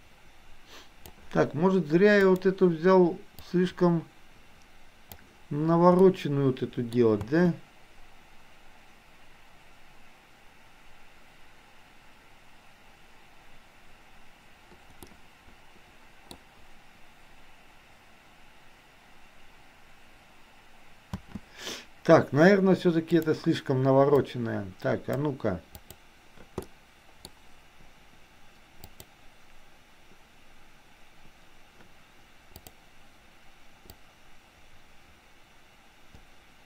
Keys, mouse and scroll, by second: 2.2 click, 3.6-5.3 drag, 6.0-6.8 middle drag, 7.2 space, 15.1-16.3 middle drag, 21.2 space, 23.2 click, 24.2-25.2 drag, 25.8 click, 26.7-27.2 middle drag, 28.8 click, 32.7 click, 34.1-36.6 drag.